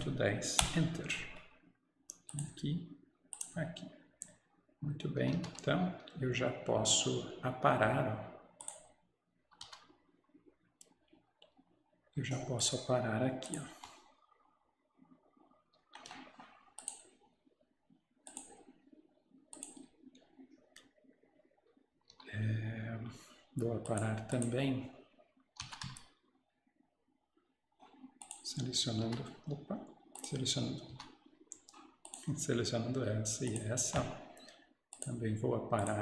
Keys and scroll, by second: 0.0-1.7 typing, 5.2-5.9 typing, 9.7 Escape, 11.5 Escape, 22.0 Escape, 22.2 Escape, 25.7 Escape, 25.9 Escape, 29.1 Escape.